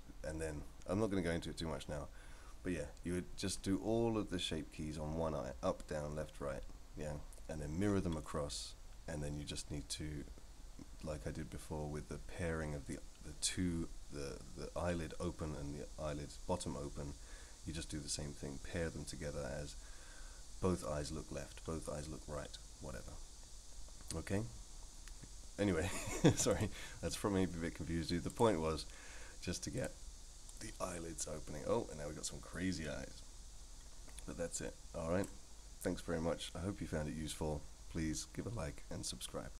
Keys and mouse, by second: 26.5 click, 29.8 click, 30.6-35.3 drag.